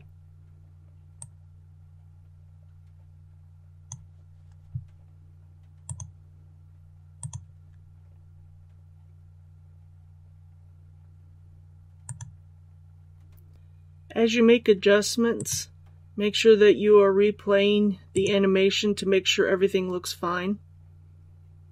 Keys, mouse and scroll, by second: 1.2 click, 2.1-16.4 drag.